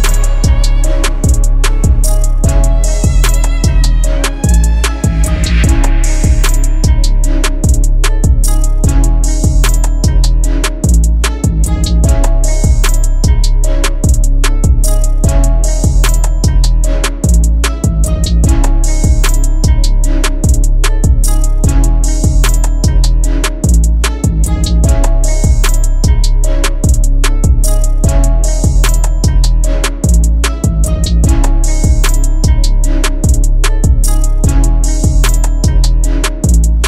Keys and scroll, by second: 8.0 shift+super+,, 8.6 shift+super+,, 8.9 shift+super+,, 9.1 shift+super+,, 25.3 super+v, 26.6 BackSpace.